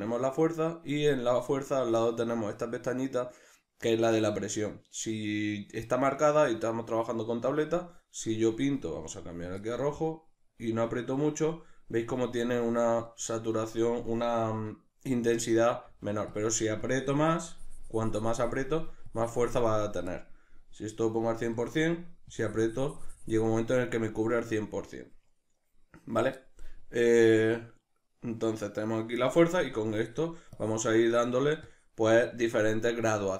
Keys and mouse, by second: 9.0-12.6 drag, 12.6-16.4 middle drag, 15.8 f, 16.4 click.